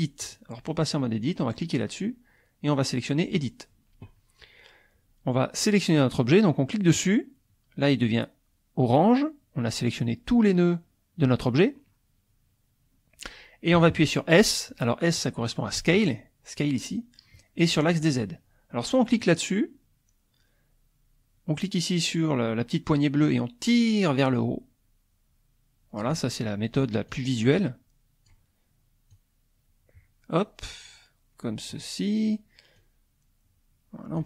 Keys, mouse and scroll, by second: 0.2 click, 3.4 click, 6.9 click, 19.4 click, 23.2-26.2 drag, 27.1-28.5 drag, 29.3-31.9 drag, 32.9-34.2 drag.